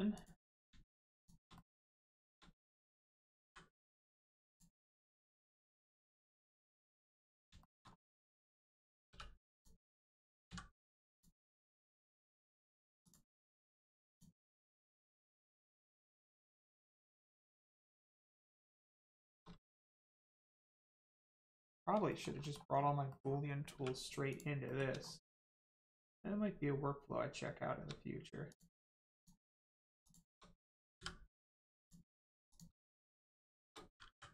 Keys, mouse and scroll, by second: 0.1 click, 0.3 middle click, 1.1 shift+click, 1.5 middle click, 3.4 m, 4.5 click, 5.4 middle click, 5.8 scroll up 1, 6.3 middle click, 7.6 shift+middle click, 7.8 scroll up 1, 9.0 3, 9.4 click, 12.1 middle click, 12.5 click, 13.3 x, 14.0 click, 14.4 middle click, 16.2 scroll down 1, 16.6 shift+middle click, 17.0 middle click, 17.0 middle click, 17.4 shift+middle click, 18.0 middle click, 18.1 middle click, 18.8 scroll down 1, 19.2 shift+middle click, 19.5 middle click, 19.6 middle click, 20.7 shift+middle click, 21.2 middle click, 21.3 middle click, 21.6 scroll up 1, 22.0 shift+middle click, 23.0 scroll down 1, 23.0 middle click, 23.7 1, 24.2 click, 24.6 middle click, 25.0 shift+scroll up 1, 25.2 shift+middle click, 25.6 scroll up 1, 28.4 click, 29.1 shift+click, 31.7 click, 33.2 shift+click.